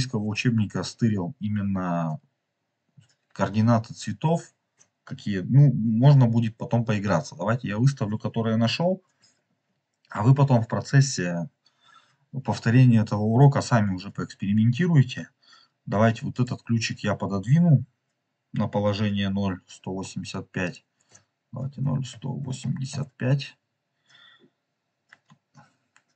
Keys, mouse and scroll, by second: 16.3 click, 20.6 click.